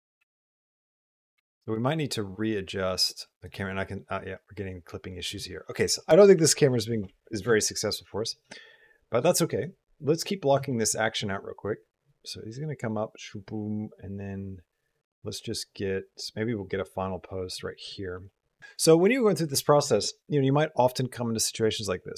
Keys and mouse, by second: 0.0-1.4 space, 1.0 click, 1.4-3.3 drag, 9.1 click, 9.9 middle click, 10.5 shift+middle drag, 10.8 middle drag, 11.5-17.4 drag, 18.1 middle click, 18.6 space, 21.5 click.